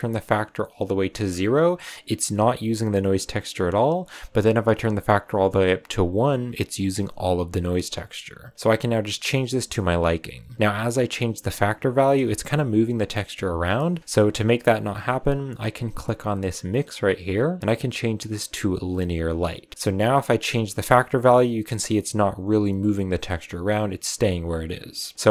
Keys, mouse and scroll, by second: 1.2-1.6 scroll down 6, 2.1 click, 4.3-6.9 drag, 8.5-13.7 drag, 14.3-19.2 drag, 19.8-22.8 drag.